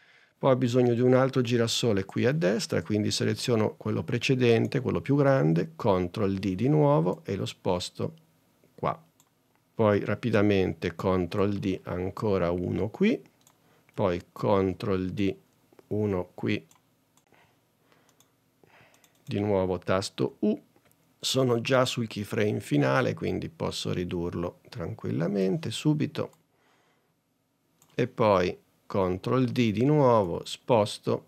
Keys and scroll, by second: 6.3 super+d, 11.2 super+d, 14.7 super+d, 20.3 u, 29.5 super+d.